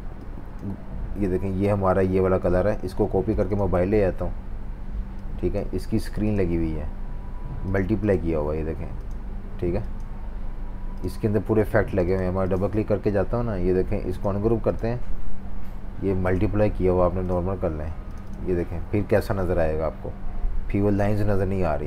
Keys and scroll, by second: 1.2 super+z, 2.8 super+c, 3.9 super+v.